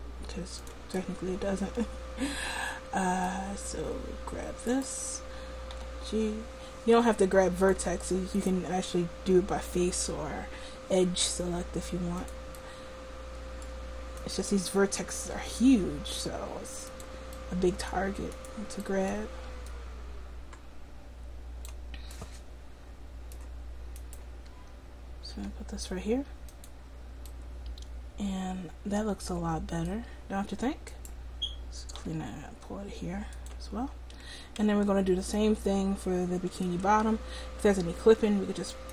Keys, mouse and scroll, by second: 4.8-6.5 right drag, 5.8 g, 8.4-10.2 right drag, 9.8 g, 10.2 middle click, 12.6-14.3 middle drag, 15.5 g, 18.5-21.7 drag, 19.8 right click, 22.3 middle click, 23.3 middle click, 24.0-27.0 drag, 25.4 g, 27.0 middle click, 31.0-32.8 right drag, 32.1 g, 33.4 click, 33.9 middle click, 34.7 Tab, 38.1 Tab.